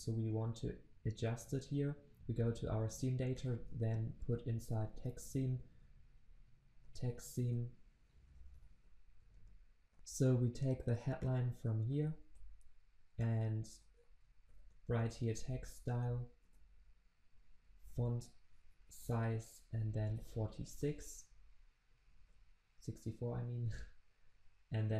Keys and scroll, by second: 5.0 Return, 12.3 ctrl+c, 14.4 ctrl+v, 16.4 Return, 22.2 ctrl+s.